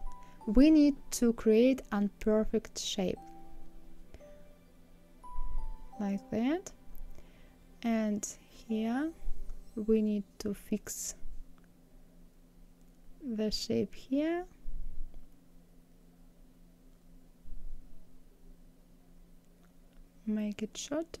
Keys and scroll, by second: 10.0 ctrl+z.